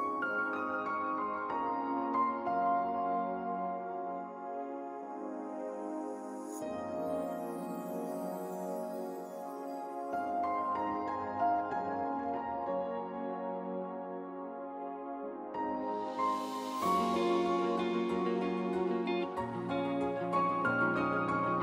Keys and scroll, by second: 17.2-19.1 typing, 19.6 Return.